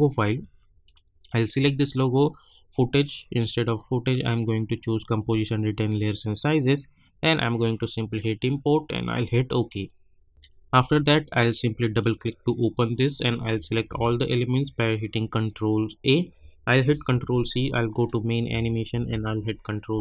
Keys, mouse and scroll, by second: 0.8 click, 5.1 click, 9.5 click, 12.1 click, 13.8 ctrl+a, 15.0 scroll down 1, 16.8 ctrl+c, 17.9 click, 18.9 ctrl+v.